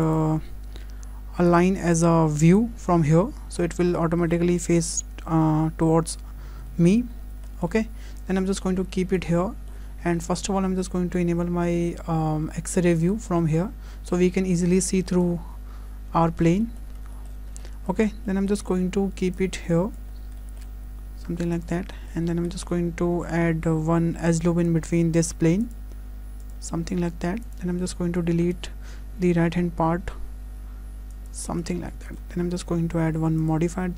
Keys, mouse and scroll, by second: 0.1 click, 1.5 click, 3.6 scroll up 2, 4.0 shift+middle click, 6.7 shift+middle click, 7.1-7.4 scroll down 3, 7.4 shift+middle click, 8.2 click, 9.4 shift+middle click, 9.9 scroll up 2, 10.2 shift+middle click, 12.8 click, 14.6 click, 16.2 scroll up 2, 16.6 shift+middle click, 17.6 shift+middle click, 18.6 shift+middle click, 18.8-19.4 scroll down 2, 19.4 click, 20.1 scroll up 2, 20.4 shift+middle click, 20.7 s, 21.9 shift+middle click, 22.3 scroll up 2, 22.5 shift+middle click, 23.7-24.3 scroll down 3, 24.1 Tab, 25.6 click, 26.4 click, 28.2 click, 29.9 Delete, 31.9 shift+middle click, 32.2 Tab, 33.4 click.